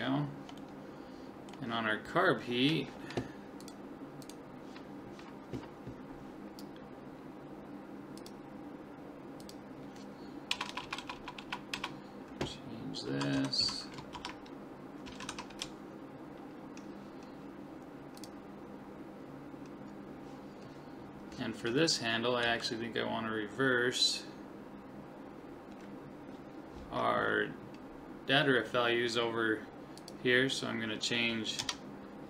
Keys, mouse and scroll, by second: 0.2 middle click, 0.6-2.6 middle drag, 8.2 click, 10.7 BackSpace, 10.8 BackSpace, 11.2 BackSpace, 11.8 BackSpace, 22.4 Right, 30.0 click.